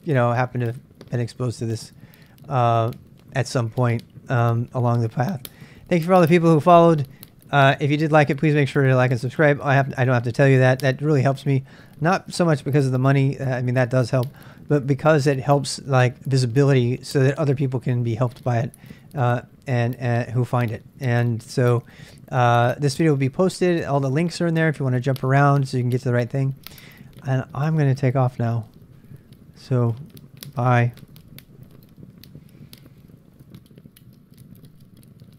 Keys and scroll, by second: 31.6 ctrl+alt+r.